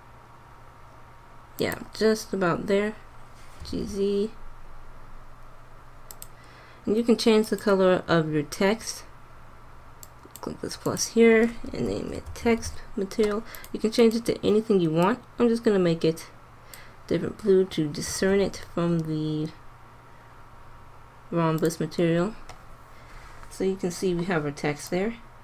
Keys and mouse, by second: 2.1-3.2 drag, 3.6 g, 5.9-7.5 drag, 9.2-12.7 drag, 14.0-16.2 drag, 17.9 g, 24.0 click, 24.9-25.4 drag.